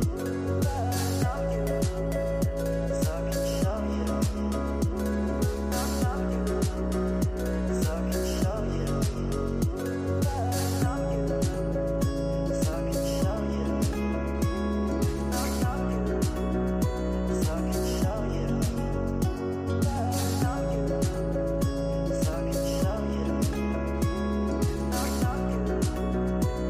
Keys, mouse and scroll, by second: 1.3 click, 4.2 click, 4.7 scroll up 2, 5.5 shift+middle click, 6.7 g, 11.4 scroll down 4, 11.9-15.5 middle drag, 15.5 KP_7, 16.8 g, 20.0 scroll up 7, 21.5 g, 24.8-25.2 scroll down 5, 25.2 shift+middle click, 26.1 g.